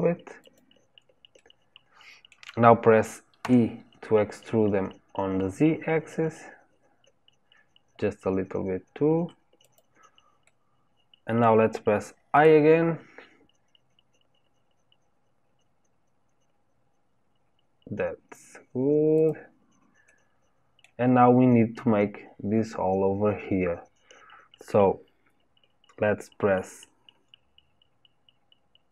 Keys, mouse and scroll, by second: 1.3-3.4 middle drag, 3.4 e, 10.4-12.3 middle drag, 12.3 i, 14.6 typing, 20.0-24.2 middle drag.